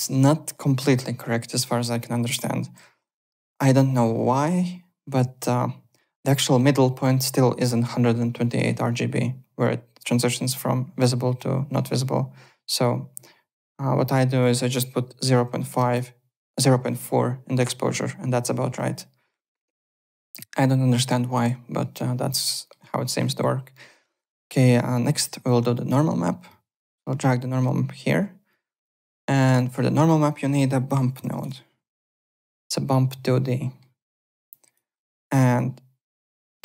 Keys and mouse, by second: 14.4 click, 15.2 KP_0, 15.4 KP_Decimal, 15.5 KP_4, 15.8 Return, 15.8 KP_Enter, 21.9 middle click, 26.5 middle click, 28.5 click, 29.0 click, 30.2 click, 30.8-31.9 typing, 32.9 middle click, 34.4 click, 35.3 click.